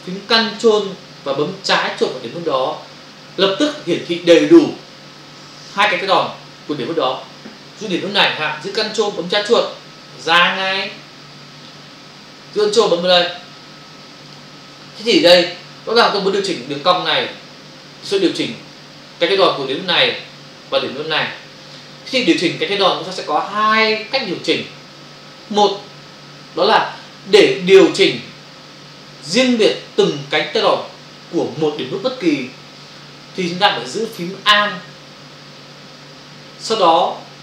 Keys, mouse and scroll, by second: 10.2 ctrl+click, 10.4 ctrl+click, 14.3 ctrl+click.